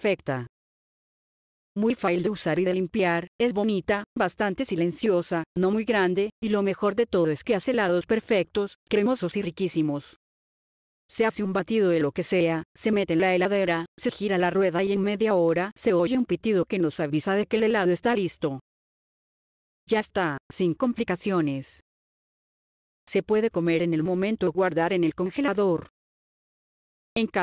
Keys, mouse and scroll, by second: 10.6 F8, 10.9 click, 22.9 click.